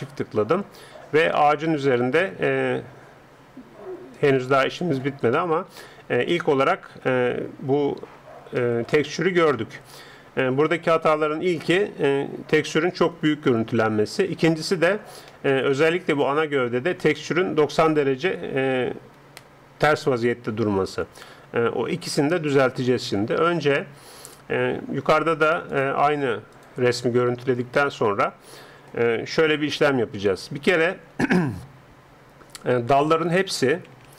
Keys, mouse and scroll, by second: 1.3-4.2 middle drag, 4.2-6.0 drag, 6.0-7.5 middle drag, 8.6-19.9 middle drag, 25.7-27.3 drag, 28.9-29.9 middle drag.